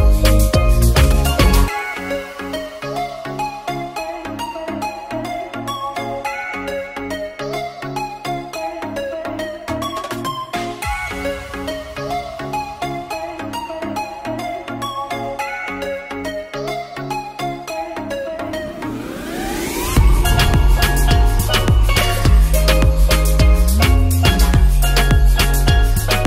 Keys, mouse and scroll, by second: 4.9 ctrl+b, 6.0 q, 7.1 shift+middle click, 7.1 shift+a, 8.0 click, 9.3 click, 9.5 s, 13.1 click, 13.4 ctrl+s, 17.5 shift+middle click, 18.3 click, 19.3 g, 19.6 z, 19.7 Up, 21.6 Down, 23.3 right click, 24.1 ctrl+s, 26.2 click.